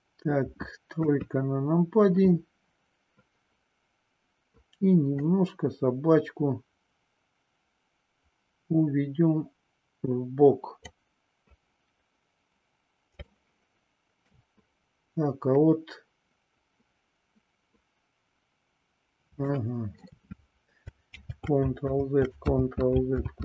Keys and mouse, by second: 0.9 KP_3, 5.1-10.7 drag, 13.3-14.4 shift+middle drag, 19.5 shift+middle click, 21.8 ctrl+z.